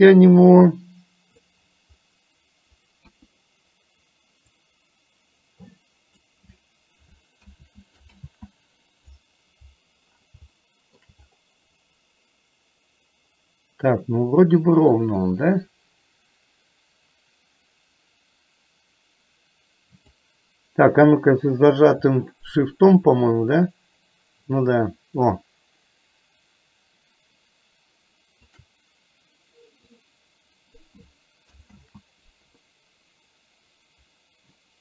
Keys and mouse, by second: 3.1 KP_1, 4.5-5.6 drag, 7.5 ctrl+z, 8.4 ctrl+z, 10.6 shift+middle click, 15.1-16.9 drag, 18.2-20.2 drag, 23.4-28.6 shift+drag, 29.9-30.9 drag, 31.9 ctrl+z, 34.2-34.8 drag.